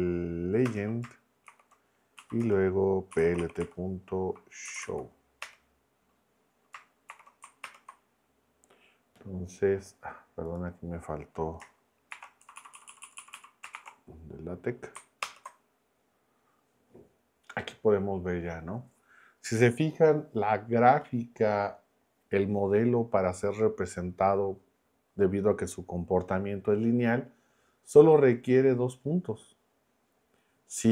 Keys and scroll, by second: 0.0-0.1 typing, 0.7 Return, 1.5 shift+9, 2.2 Right, 2.4 Return, 2.9-5.3 typing, 5.4 Return, 7.1 shift+9, 7.6 ctrl+Return, 12.1 shift+4, 12.4 Right, 13.1 Right, 13.7 shift+4, 15.2 ctrl+Return.